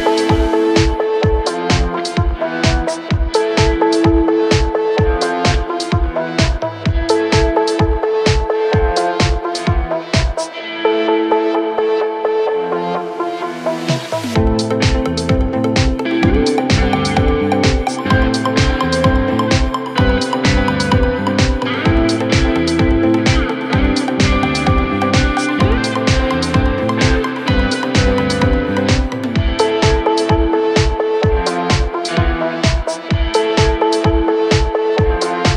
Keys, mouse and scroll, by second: 2.3-3.0 alt+scroll up 2, 3.0-3.5 scroll up 1, 3.7-5.1 shift+drag, 8.2 alt+scroll down 1, 9.4 alt+scroll up 1, 9.6 space, 9.7-10.2 click, 10.0 space, 10.5 click, 11.5 click, 12.1 ctrl+t, 13.1 click, 14.2-16.7 drag, 16.7 alt+scroll up 1, 17.5-17.9 shift+click, 19.9-20.2 alt+scroll down 1, 21.5 alt+scroll up 1, 21.8-22.3 click, 22.1 space, 22.6 alt+scroll up 1, 23.8 click, 24.4 alt+scroll up 1, 24.8 space, 25.1 click, 25.2 space, 26.2 click, 26.5 space, 26.7 click, 26.8 click, 26.9-27.5 space, 28.3 click, 31.1-32.4 typing, 34.5 typing.